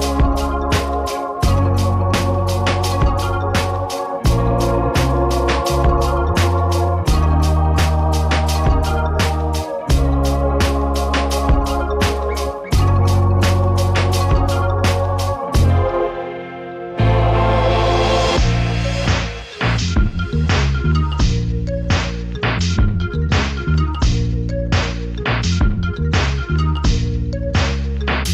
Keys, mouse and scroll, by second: 1.8-4.4 drag, 5.4 click, 6.0 click, 6.8 KP_Subtract, 8.0 KP_Add, 8.6 KP_Add, 11.4 click, 13.2 click, 19.3 right click, 22.0 click, 24.8-26.2 drag, 26.8 click, 28.1 click.